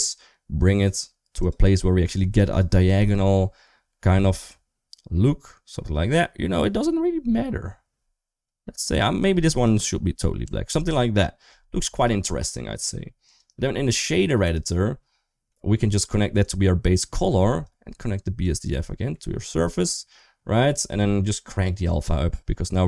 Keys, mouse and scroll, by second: 2.3 click, 2.8 g, 10.3 Tab, 13.2-14.3 drag, 15.3 middle click, 16.4-16.9 drag, 17.4-18.3 drag, 19.0 middle click, 21.8 click.